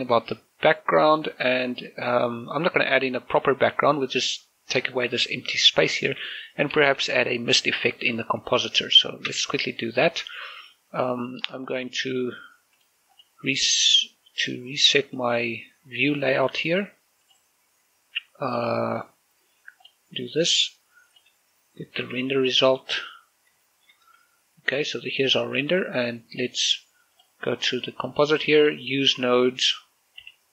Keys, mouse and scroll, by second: 2.6-3.4 scroll up 2, 3.4 scroll up 1, 3.4 middle click, 6.0 shift+middle click, 8.8 shift+middle click, 9.4 shift+space, 11.9 right click, 12.8-16.1 drag, 22.0 typing, 23.3 click, 23.7 shift+middle click, 25.3 scroll up 1, 25.6 middle click, 27.2 click, 30.3-30.5 typing.